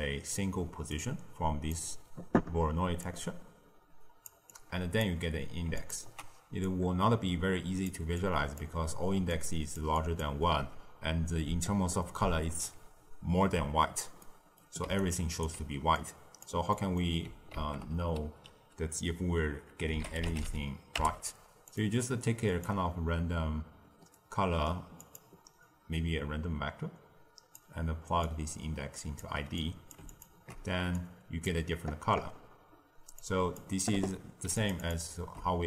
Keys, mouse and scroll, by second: 0.9 drag, 3.0 drag, 4.4 click, 5.7 ctrl+shift+click, 6.6 click, 8.1 click, 9.1 d, 9.2 click, 9.7 d, 9.9 click, 10.1 d, 10.2 d, 12.6 d, 14.1-14.8 middle drag, 14.8 d, 14.9 right click, 15.4 d, 15.9 click, 16.6 middle click, 17.5 ctrl+a, 22.4-25.6 drag, 28.2 drag, 29.5 click, 30.1 ctrl+shift+click, 30.9 click, 33.1 click, 34.5 ctrl+shift+click, 34.7 ctrl+shift+click.